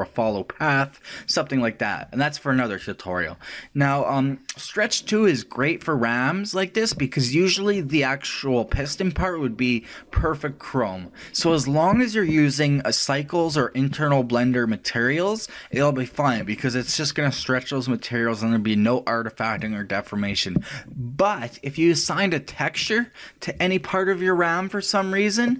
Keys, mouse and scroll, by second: 22.5 right click.